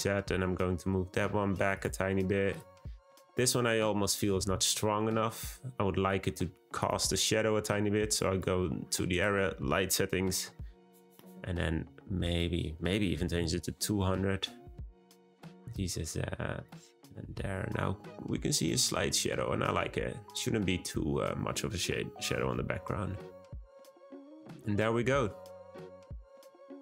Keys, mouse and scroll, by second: 2.5 click, 4.1 g, 8.1 click, 9.1 click, 10.3 0, 12.2 click, 13.2 0, 15.3 g, 17.0 click, 23.7 click, 24.1-26.8 scroll up 2.